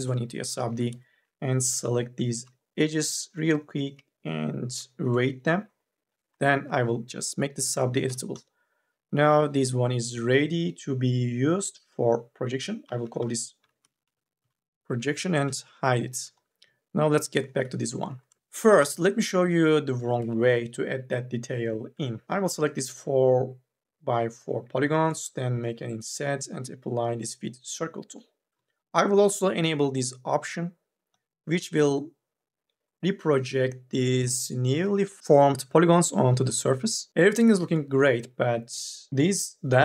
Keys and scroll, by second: 0.6 2, 1.1 e, 1.5 u, 1.9 l, 7.9 c, 12.7-14.5 typing, 17.7 3, 18.4 e, 19.8 3, 20.0 e, 25.4 m, 25.8 w, 37.1 3, 38.4 1, 38.6 2.